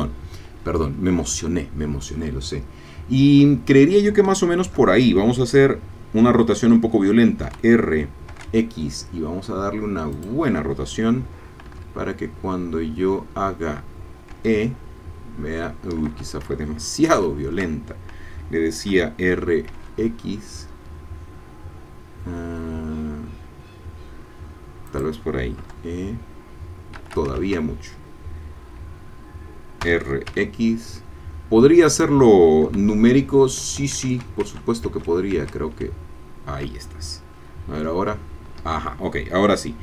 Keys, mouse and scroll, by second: 7.4 r, 8.3 x, 10.1 click, 11.6 e, 14.3 e, 16.0 Escape, 17.0 ctrl+z, 18.9 r, 19.7 x, 24.9 click, 25.6 e, 26.9 Escape, 27.4 ctrl+z, 29.8 r, 30.3 x, 31.9 click, 32.9 e, 33.6 Escape, 34.1 ctrl+z, 37.8 e, 38.6 Escape.